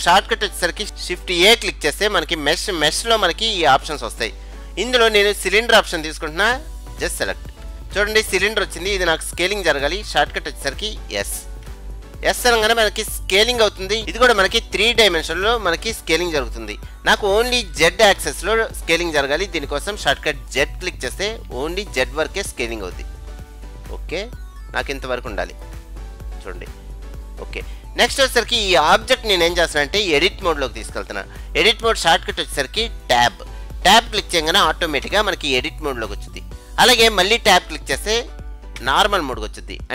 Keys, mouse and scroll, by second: 1.5 shift+a, 11.6 s, 26.5-26.9 scroll up 2, 26.9-27.5 scroll down 2, 27.5-28.8 middle drag, 28.8-29.4 scroll up 2, 29.4 scroll up 1, 35.1 Tab, 38.9 Tab.